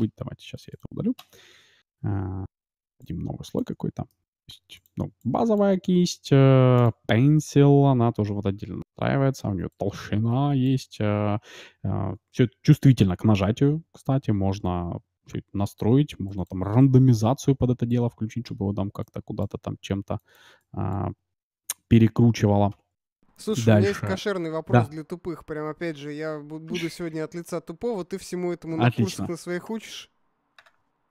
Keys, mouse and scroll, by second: 0.6-2.7 drag, 2.7-3.7 d, 3.0-8.7 drag, 4.0-6.7 middle drag, 5.1-5.7 d, 9.7-11.6 drag, 12.9-14.8 scroll down 1, 14.8 scroll down 1, 14.9-15.3 scroll up 1, 16.3-23.9 drag, 17.0 d, 17.9 d, 18.8 d, 21.8 d, 22.4 d, 23.0-24.8 middle drag, 24.6-27.2 drag, 25.1-26.0 d, 27.6-29.5 drag, 30.5-31.1 drag.